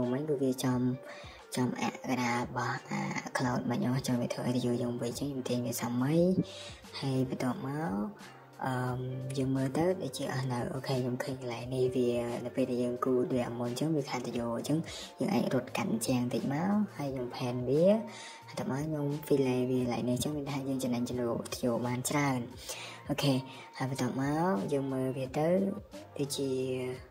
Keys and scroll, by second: 1.3 ctrl+z, 1.5 ctrl+z, 4.4 Escape, 9.5 typing, 11.0 typing, 12.9 Escape, 13.0 Escape, 13.7-14.2 typing, 16.4 Escape, 17.2 typing, 19.6 Escape, 19.8 Escape.